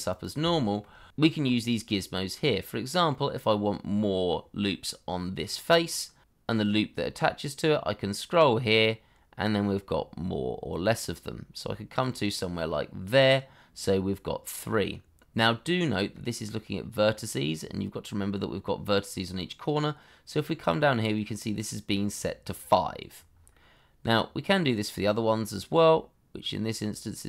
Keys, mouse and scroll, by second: 0.0 s, 0.3 shift+middle click, 0.5 shift+scroll up 1, 0.7 middle click, 1.1 Escape, 4.0 middle click, 15.3 scroll up 1, 15.7 middle click, 23.1-23.5 scroll down 1, 23.5 middle click.